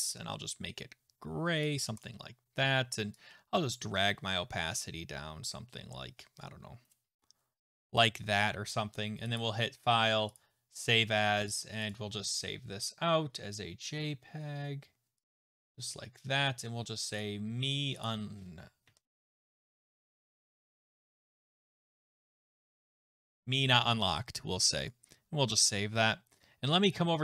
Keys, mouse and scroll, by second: 1.6 click, 2.0 click, 7.9 click, 9.4 click, 10.4 click, 11.9 click, 15.4 click, 18.0 click, 18.9 Right, 19.0 Left, 19.2 Left, 19.3 BackSpace, 19.3 BackSpace, 19.7 BackSpace, 21.5-23.8 typing, 23.0 middle click, 23.8 Tab, 24.9 click, 26.4 click.